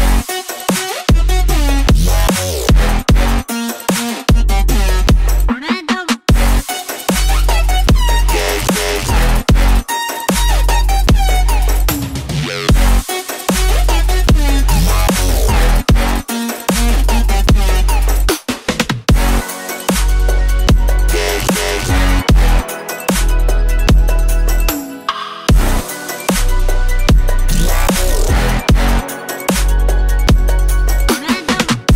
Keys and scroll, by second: 27.0 ctrl+z, 30.9 Delete.